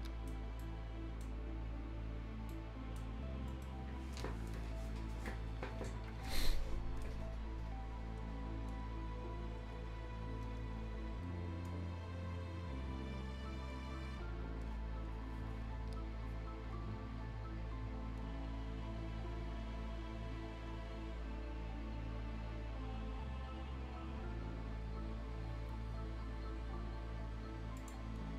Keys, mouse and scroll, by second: 0.6-3.1 shift+right drag, 3.1 shift+scroll down 1, 3.3 shift+scroll up 1, 3.5 shift+middle click, 27.8 shift+click.